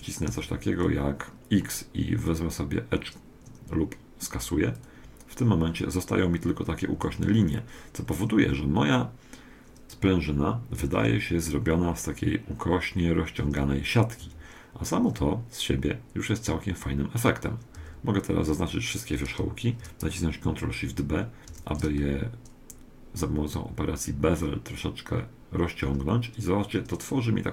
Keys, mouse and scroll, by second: 0.3 x, 7.0 a, 7.4-10.2 middle drag, 13.4 Tab, 13.8-18.2 middle drag, 14.2 Tab, 15.4-15.9 scroll up 3, 17.8 a, 21.6 ctrl+shift+b.